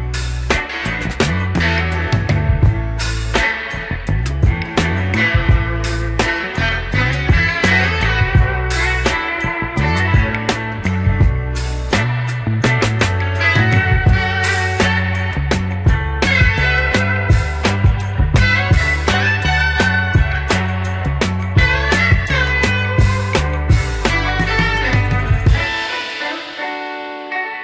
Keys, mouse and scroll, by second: 6.0-8.4 drag, 8.7 scroll up 2, 9.0 shift+middle drag, 9.6-10.5 middle drag, 10.8 click, 10.9 Tab, 11.6 Tab, 12.1 middle click, 12.7 KP_1, 14.0-15.1 scroll up 3, 19.0 click, 19.2 Tab, 20.9 click, 21.9 click.